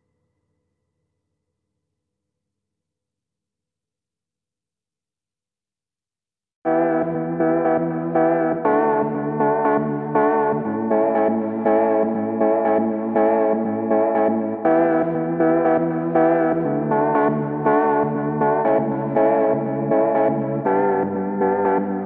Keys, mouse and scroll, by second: 0.0 right click, 1.2-2.2 drag, 4.1 shift+click, 5.1 shift+click, 6.9 shift+click, 8.6 click, 9.3 click, 10.4 click, 11.5-12.7 drag, 12.7-13.7 middle drag, 14.0 click, 15.6 click, 15.9 ctrl+t, 17.6 click, 20.9-22.0 drag, 21.8 Up.